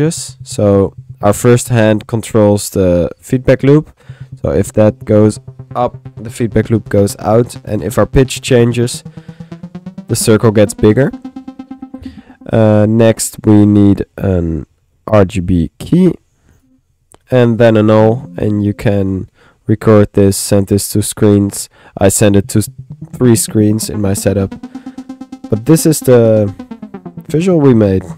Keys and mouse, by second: 2.3-12.6 middle drag, 12.8 click, 14.3-15.5 drag, 15.1 Tab, 15.5 r, 16.1 click, 16.6 click, 17.2 alt+click, 18.4 alt+click, 18.5 alt+n, 19.4 alt+middle click, 20.0 middle click.